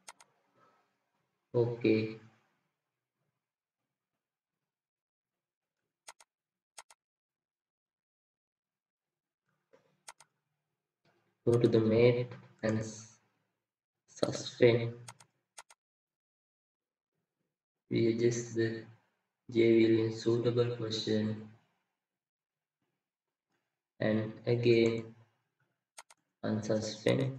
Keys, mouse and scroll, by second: 12.5 typing, 12.6 right click, 24.6 right click.